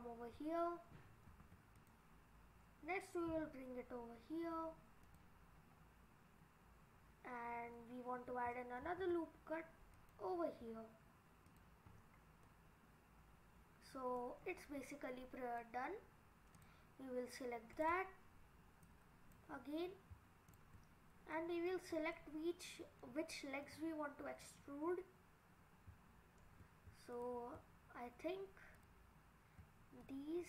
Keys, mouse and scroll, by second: 1.3 ctrl+r, 5.6 scroll down 2, 8.8 ctrl+r, 11.9-12.5 scroll up 4, 12.5 middle click, 14.3 scroll down 2, 15.1 middle click, 16.6 click, 17.7 click, 18.8 click, 20.5 shift+click, 21.1-21.8 scroll up 2, 21.4 middle click, 21.8-22.2 scroll down 4, 22.2 middle click, 23.4 middle click, 24.7 scroll up 3, 27.1 shift+click, 30.0 shift+click.